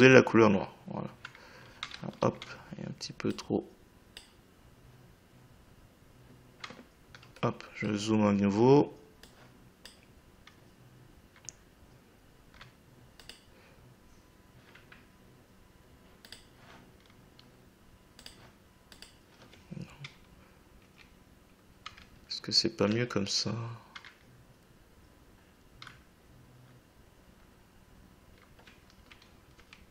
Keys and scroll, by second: 2.0 ctrl+z, 20.8 Left, 29.5 Right.